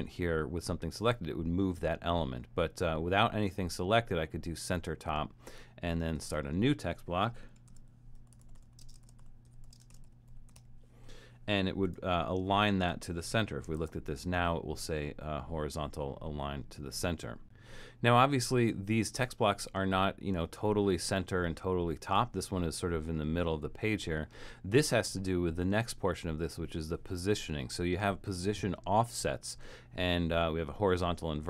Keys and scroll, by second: 7.4-11.1 typing, 13.8 shift+Return.